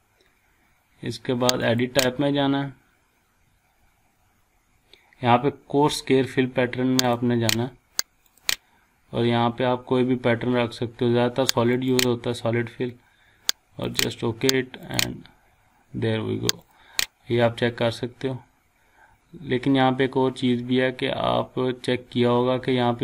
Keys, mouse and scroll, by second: 1.6 click, 7.0 click, 9.8-11.0 scroll down 1, 11.0 scroll up 1, 11.7 click, 15.8 scroll down 1, 16.6 click, 17.0 scroll down 1, 17.4-17.9 scroll up 1, 18.1 scroll down 1, 18.4 scroll up 1, 19.2 scroll down 1, 20.4-20.9 scroll up 1.